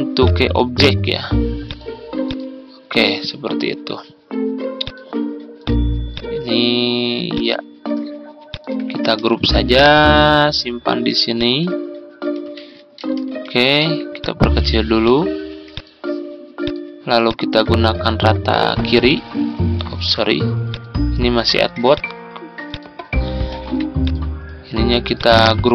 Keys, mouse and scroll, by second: 8.4 shift+click, 9.4 ctrl+g, 9.8-11.5 drag, 11.7 ctrl+scroll down 1, 14.1 click, 15.6 shift+click, 16.5 shift+click, 17.1 shift+click, 18.8 click, 19.7 ctrl+z, 20.5 click, 23.4 ctrl+z, 23.9 click.